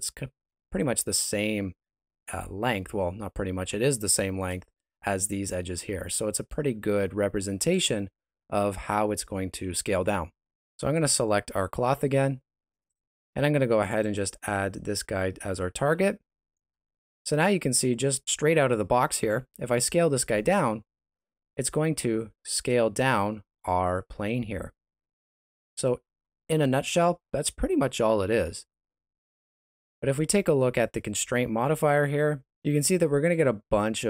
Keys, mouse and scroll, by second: 2.6 scroll down 3, 2.9 middle click, 5.8 middle click, 6.9 ctrl+middle click, 10.5 right click, 12.8 click, 15.9 middle click, 17.1 right click, 19.4 s, 22.9 shift+z, 23.4 s, 26.0 shift+z, 29.4 right click.